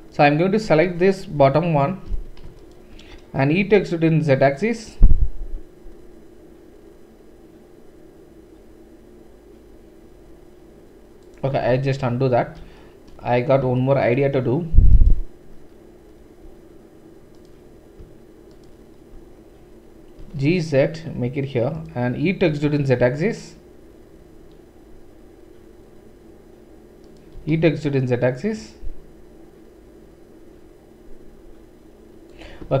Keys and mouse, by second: 0.2 super+click, 0.6-2.6 middle drag, 2.6 alt+click, 2.7 alt+middle click, 3.6-14.8 middle drag, 3.6 e, 11.7 ctrl+z, 14.9 alt+click, 15.0 typing, 18.5 alt+click, 18.6 typing, 20.2-32.8 middle drag, 20.2 g, 22.5 e, 27.3 e.